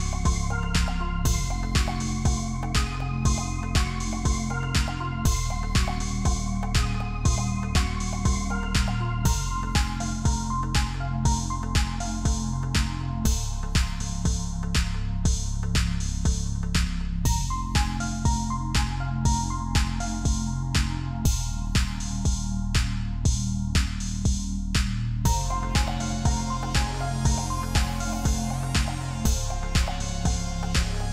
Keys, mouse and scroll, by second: 1.5 alt+scroll up 1, 2.0 alt+scroll down 1, 5.0 ctrl+click, 7.0 space, 8.0 ctrl+d, 8.9 ctrl+t, 10.2 Return, 10.7 alt+click, 12.1 alt+shift+click, 15.3 ctrl+click, 16.5 ctrl+shift+click, 18.4 double click, 22.6 ctrl+click, 29.2 ctrl+t.